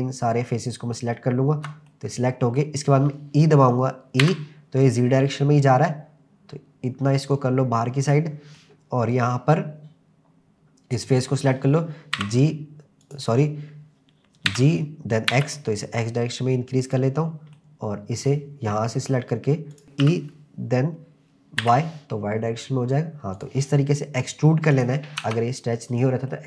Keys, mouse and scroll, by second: 1.9 middle click, 4.2 e, 8.1 click, 8.6-9.6 middle drag, 11.1 click, 12.2 e, 13.1 click, 14.5 g, 15.3 x, 16.9 click, 17.2 scroll down 1, 17.6 middle click, 19.7 click, 19.8 scroll up 3, 20.1 e, 21.6 y, 23.4 click, 24.7 click, 25.2 Tab, 25.8-26.2 scroll down 2, 26.3-26.4 middle drag.